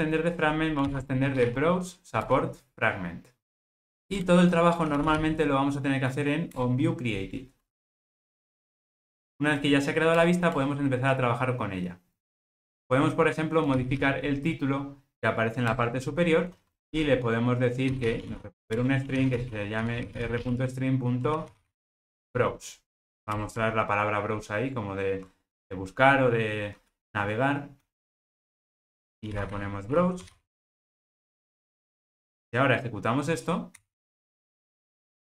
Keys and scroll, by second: 2.3 Return, 3.7 alt+super+l, 6.7 Return, 15.8 Return, 18.9 Return, 23.4 alt+Return, 33.9 ctrl+r.